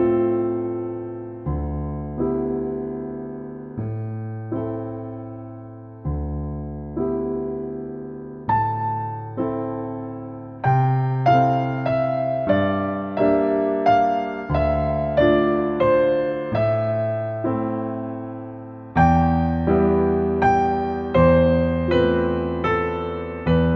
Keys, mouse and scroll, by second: 0.6 click, 2.7-4.0 typing, 4.2 Return, 6.4 middle click, 7.6-7.9 scroll up 1, 8.9 middle click, 10.7 m, 11.9 click, 13.1 click, 13.8 space, 14.0 scroll down 1, 14.9 middle click, 15.8 click, 18.1 click, 19.4 click, 21.2 click, 22.5 click, 23.3-23.7 scroll down 1.